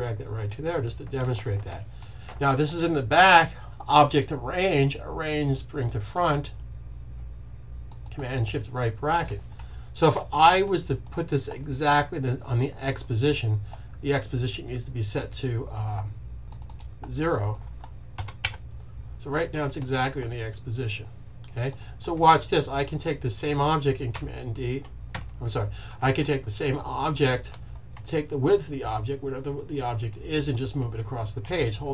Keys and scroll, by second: 18.1 0, 24.0 d, 25.0 z.